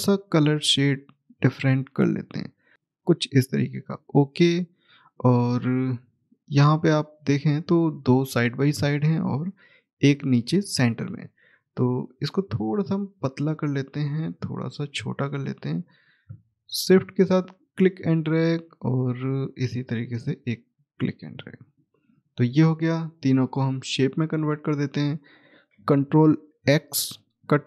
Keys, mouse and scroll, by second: 2.7 click, 5.4-5.7 scroll down 1, 6.3 middle click, 7.1-8.4 scroll up 1, 9.0 scroll down 1, 9.0 middle click, 10.1-11.7 scroll up 1, 11.7 click, 17.4 shift+right click, 18.4 click, 20.4 right click, 21.5 shift+click, 24.3-25.6 scroll down 1, 26.6 ctrl+z.